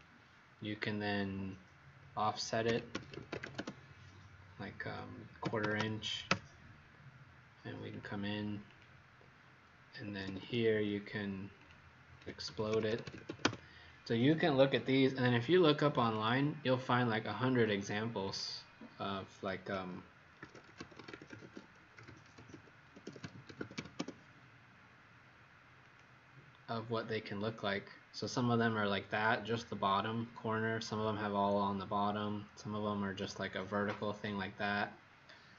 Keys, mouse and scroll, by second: 2.3-3.9 typing, 5.6 KP_2, 6.2 Return, 7.9 click, 10.0 Escape, 10.2 Escape, 10.4 Escape, 11.5 click, 11.9-13.7 typing, 14.7 Escape, 15.9 click, 20.1-24.2 typing, 25.7 click.